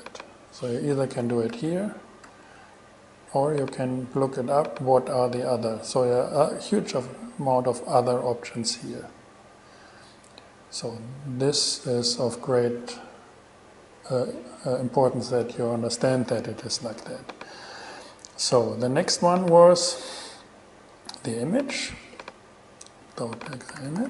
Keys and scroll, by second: 1.7 shift+super+e, 23.7-24.0 typing.